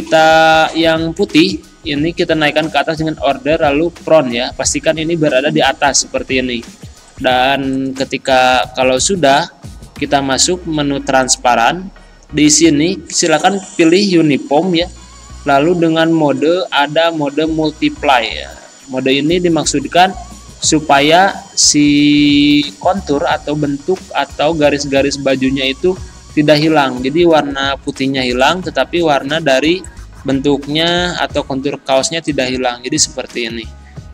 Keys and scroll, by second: 24.0 z, 30.9 c.